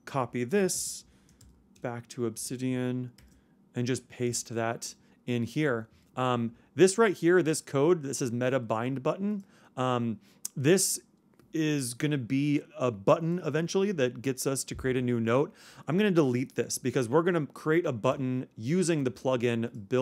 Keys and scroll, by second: 0.7 super+space, 1.3 super+o, 2.7 super+Return, 3.2 super+v.